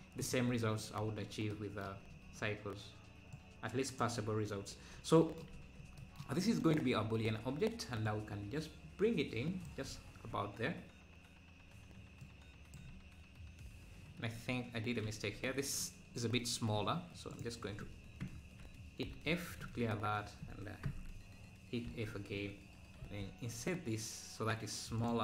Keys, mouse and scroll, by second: 1.2 scroll down 2, 3.3 click, 8.0-9.9 drag, 12.2 click, 17.3 click, 18.3 ctrl+KP_Add, 19.1 f, 20.2 scroll up 1, 20.9 ctrl+KP_Add, 21.9 f.